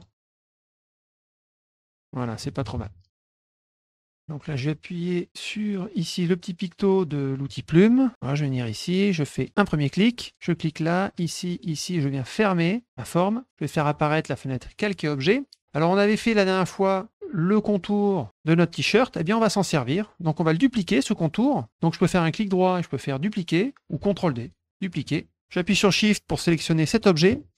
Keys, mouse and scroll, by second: 0.4 click, 1.1 click, 1.8 click, 3.1 middle click, 7.4 click, 9.3 click, 10.3 click, 11.1 click, 11.6 click, 12.9 middle click, 13.7 click, 14.5 click, 17.5 middle click, 22.0 right click, 25.0 click, 26.6 shift+click.